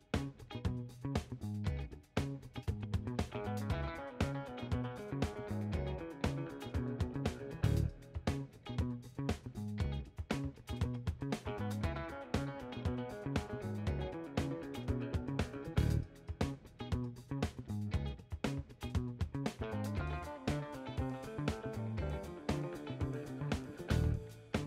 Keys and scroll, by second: 9.6 w, 23.2 w.